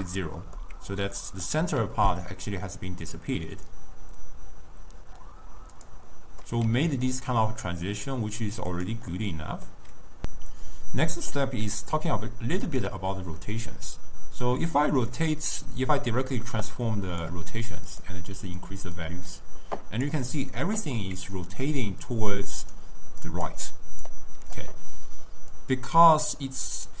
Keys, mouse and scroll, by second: 0.7-1.7 middle drag, 1.7 s, 6.2-6.5 middle drag, 6.5 scroll down 1, 6.8 s, 9.2-10.2 middle drag, 13.0 click, 14.8-18.6 drag, 19.0-21.0 drag, 21.0-21.7 middle drag, 21.7-24.3 d, 22.8 d, 23.3 click, 23.5 d, 23.7 click, 24.0 d, 25.6-27.0 drag.